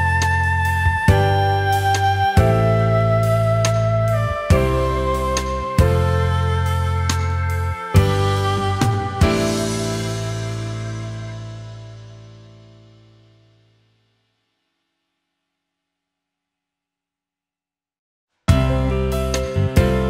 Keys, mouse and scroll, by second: 2.4 alt+scroll up 1, 2.7 space, 11.3 ctrl+z, 12.5 alt+scroll up 1, 13.8 ctrl+z, 17.8 alt+click, 19.3 ctrl+z.